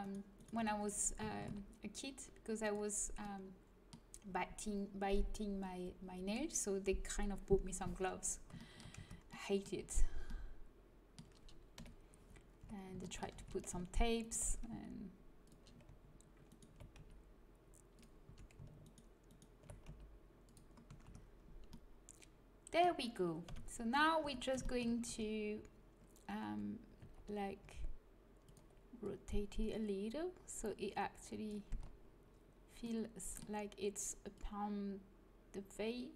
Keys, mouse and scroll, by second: 1.3 ctrl+b, 3.5-5.3 middle drag, 8.9 Tab, 9.7 middle click, 11.7 KP_1, 12.5 Tab, 13.3 a, 14.6 g, 16.9 g, 18.2 a, 19.8 g, 20.8 a, 21.0 Tab, 23.5 KP_3, 24.1 Tab, 25.0 a, 27.0 z, 27.5 r, 28.9-31.0 drag, 30.8 right click, 31.6 z, 32.8-34.3 middle drag, 34.3-36.1 drag.